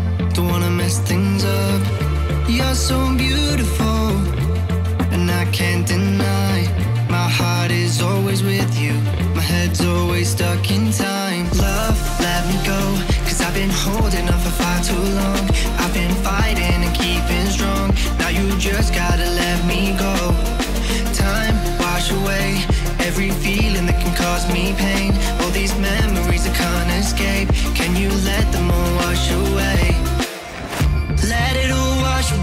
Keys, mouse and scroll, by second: 0.0-1.8 typing, 0.0-0.3 scroll down 1, 2.9 click, 3.1 scroll up 1, 3.2 scroll down 4, 3.3 r, 3.7 g, 3.9 scroll up 1, 4.0 shift+middle drag, 4.2 r, 4.7 click, 5.2 click, 5.4 click, 5.7 click, 5.9-10.2 typing, 6.8-7.1 scroll up 1, 7.1 scroll down 1, 10.5 click, 10.7 click, 11.0-11.4 shift+middle drag, 11.4 click, 11.5 scroll down 1, 11.8 s, 12.1 g, 12.9 click, 13.0 click, 13.2 scroll up 2, 13.5 r, 13.7 g, 14.4 s, 14.7 scroll down 2, 14.8-15.5 middle drag, 15.8 click, 16.1 click, 16.3 r, 16.6 g, 17.0 r, 17.4 shift+middle drag, 17.5-17.9 scroll up 5, 17.9 click, 18.2 middle drag, 18.3-19.2 scroll down 4, 19.4 scroll up 3, 19.6-20.0 scroll down 5, 19.6 middle drag, 20.1 click, 20.4 click, 20.5 scroll up 1, 20.7 scroll down 1, 20.9-21.2 scroll up 1, 21.2 click, 21.5 click, 21.8 scroll down 2, 22.0 r, 22.5 r, 22.8 g, 23.5 click, 23.7 click, 24.1 scroll up 5, 24.3-26.6 typing, 25.5 scroll down 6, 27.1 click, 27.2-27.8 middle drag, 27.8 g, 28.7 middle click, 28.9 click, 29.0-29.6 middle drag, 29.6-30.0 scroll up 4, 30.0 click, 30.2 scroll down 2, 30.3 g, 31.1 click, 31.4 scroll up 3, 31.6 g.